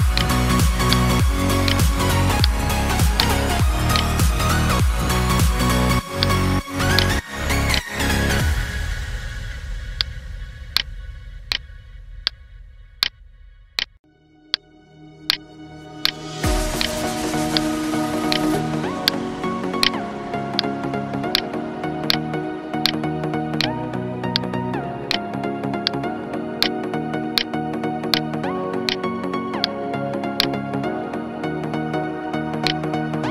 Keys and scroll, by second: 5.1 ctrl+z, 5.9 space, 7.7 space, 9.0 ctrl+j, 10.5 ctrl+space, 11.0 ctrl+space, 23.9 ctrl+z.